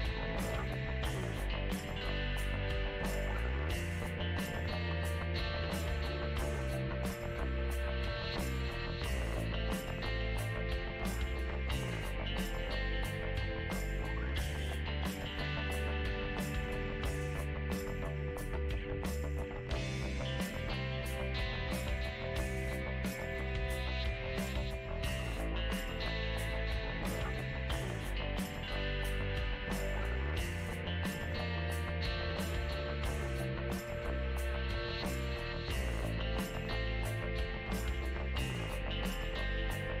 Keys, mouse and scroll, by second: 0.2 click, 1.1 middle click, 1.6 f, 2.3-4.4 drag, 4.4 middle click, 5.3 f, 5.7 click, 6.4 f, 7.7-10.7 drag, 11.2-12.2 drag, 12.2-13.2 middle drag, 13.2-14.3 drag, 14.3 middle click, 14.8 click, 15.1 f, 15.9 click, 16.6 f, 17.2 click, 18.1 middle click, 18.5-19.6 drag, 19.6 middle click, 20.1 click, 20.8 middle click, 21.3-22.4 drag, 22.4 middle click, 22.8 f, 23.4-25.8 drag, 25.8-27.1 middle drag, 27.1 shift+c, 28.0 shift+middle click, 28.7 f, 29.4 middle click, 29.9-31.5 ctrl+drag, 31.5 middle click, 32.1 ctrl+click, 32.7 middle click, 33.2 ctrl+click, 34.2 middle click, 34.7-36.1 ctrl+drag, 36.1 middle click, 36.6-37.6 ctrl+drag, 37.6 middle click, 38.1-39.7 ctrl+drag, 39.7-40.0 middle drag.